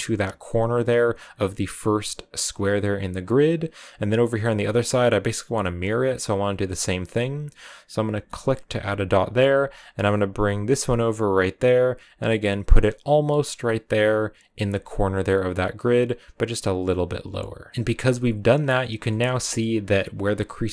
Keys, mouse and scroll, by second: 13.6-17.7 drag, 17.7 shift+middle click, 18.4 scroll down 3, 18.7 shift+middle click, 19.1 scroll up 2, 19.3-20.7 middle drag.